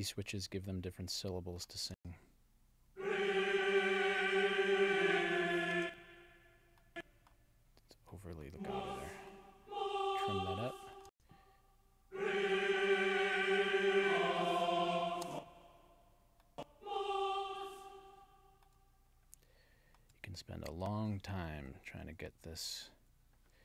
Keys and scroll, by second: 2.0 space, 5.7 space, 11.1 space, 15.2 space, 21.6 alt+Left, 22.6 alt+Right.